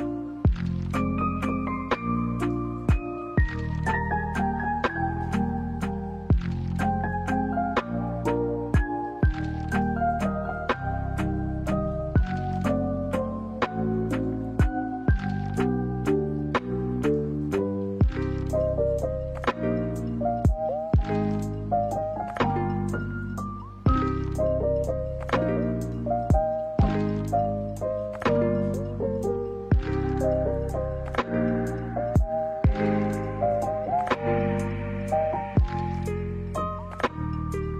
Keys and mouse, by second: 2.3 shift+middle drag, 3.5 right click, 4.4-5.1 drag, 5.4 middle click, 6.9 ctrl+r, 11.9 click, 12.6-13.2 middle drag, 13.6 middle drag, 14.5 middle click, 16.1-16.7 drag, 16.9 middle click, 17.9 ctrl+r, 18.8 middle click, 19.3 ctrl+r, 20.2 middle click, 20.7 ctrl+r, 21.6 middle click, 22.2 ctrl+r, 22.9 middle click, 23.4 ctrl+r, 24.3 middle click, 24.7 ctrl+r, 25.6 middle click, 25.9 ctrl+r, 26.7 middle click, 28.0 a, 28.1 a, 28.3 middle click, 31.1 ctrl+s, 31.8 middle click, 32.4 shift+a, 35.3 middle drag, 36.6-37.3 middle drag.